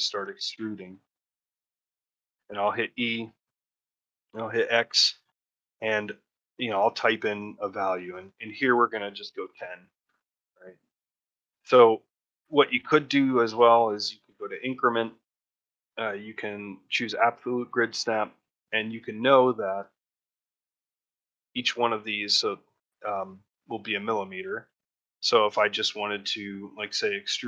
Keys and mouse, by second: 0.4 shift+middle click, 1.0 ctrl+middle click, 1.4 alt+middle click, 13.7-17.6 drag, 18.1 shift+middle click, 18.4 ctrl+middle click, 20.0 shift+middle click, 20.3 ctrl+middle click, 24.6 shift+middle click.